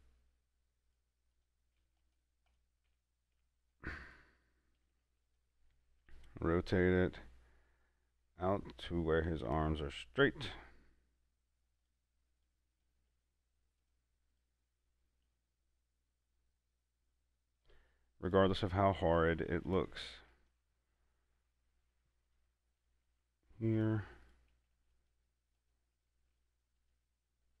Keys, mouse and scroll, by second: 0.2 right click, 1.6 click, 2.1 shift+s, 2.3 click, 3.2 Tab, 4.0 right click, 5.2 shift+s, 5.5 click, 6.3 r, 10.4 r, 10.5 click, 12.1 right click, 13.0 click, 13.4 shift+s, 14.1 click, 14.6 right click, 15.5 r, 17.9 click, 18.6 right click, 20.0 click, 20.4 shift+s, 20.6 click, 21.7 r, 22.5 click, 23.1 right click, 23.4 shift+s, 24.0 click, 24.5 right click, 25.0 shift+s, 25.2 click, 26.4 shift+s, 26.6 shift+right click, 27.1 click.